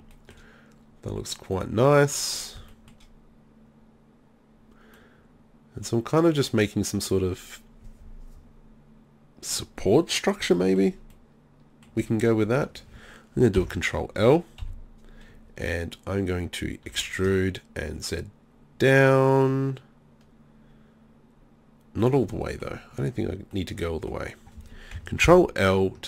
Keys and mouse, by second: 0.4-1.7 middle drag, 5.7 middle click, 6.2 middle click, 6.4-8.5 middle drag, 10.8 middle click, 11.6 middle click, 12.1-13.8 drag, 13.6 ctrl+l, 14.6 KP_3, 16.9 e, 25.3 ctrl+l.